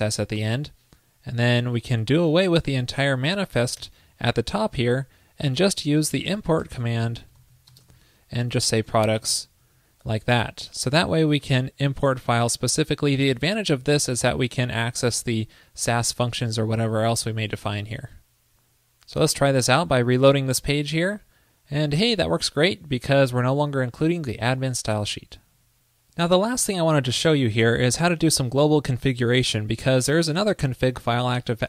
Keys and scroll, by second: 4.8 super+Down, 18.1 super+s, 19.7 super+r.